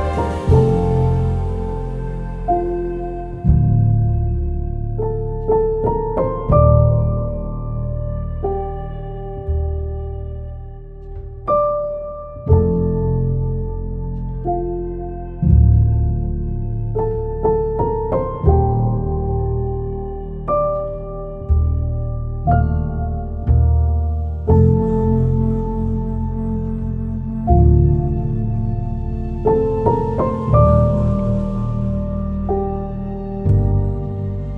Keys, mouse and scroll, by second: 4.0 scroll down 1, 4.5 click, 5.9-7.0 typing, 8.7 click, 12.7-24.9 drag, 24.9-26.3 drag, 26.4-29.0 typing, 31.3-32.8 typing.